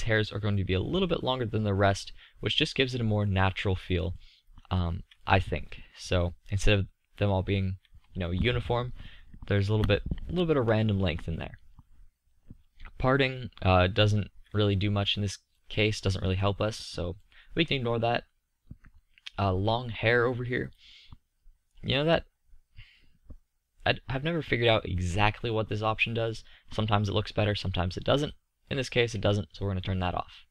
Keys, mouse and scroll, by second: 3.0-4.7 middle drag, 5.0-15.3 middle drag, 18.8-21.0 middle drag, 23.0 middle click, 24.2-24.5 scroll up 1, 28.5-30.1 middle drag.